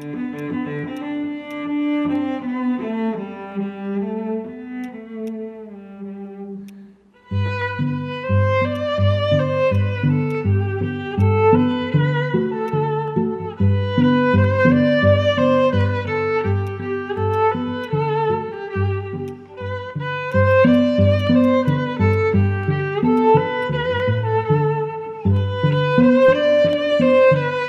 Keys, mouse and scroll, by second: 6.6-7.0 scroll up 1, 8.1 alt+middle click, 8.4 scroll down 1, 8.7 alt+click, 9.1 alt+middle click, 9.6-10.2 scroll down 2, 9.9 alt+click, 10.2 alt+click, 11.9-12.6 scroll up 1, 15.7 alt+middle click, 20.4 double click, 26.2 alt+click.